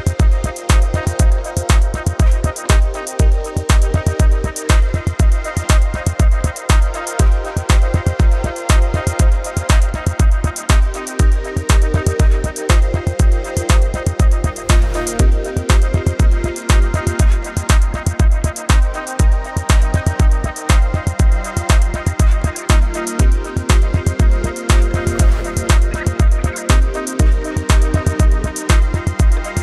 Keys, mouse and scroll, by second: 1.1-2.2 typing, 1.3 click, 1.8 click, 2.2 Left, 2.5 click, 3.3 click, 4.1 click, 5.0 click, 5.1 a, 5.2 click, 6.0 click, 6.1 v, 6.8 click, 8.7 right click, 9.9 click, 10.4 space, 10.6 click, 10.9 space, 11.2 click, 12.1 space, 12.2 click, 12.3 a, 12.4 click, 12.4 space, 13.6 click, 17.1 space, 17.2 click, 17.2 space, 17.3 v, 17.4 click, 19.5 b, 20.2 click, 21.3 ctrl+z, 21.7 click, 22.6 ctrl+z, 22.9 click, 23.6-24.8 typing, 24.2 click, 24.7 click, 25.0 click, 25.9 space, 25.9 click, 27.2 a, 27.2 click, 27.7 Up, 28.2 click, 29.0 Up, 29.2 click, 29.3-29.6 typing, 29.4 click, 29.5 click.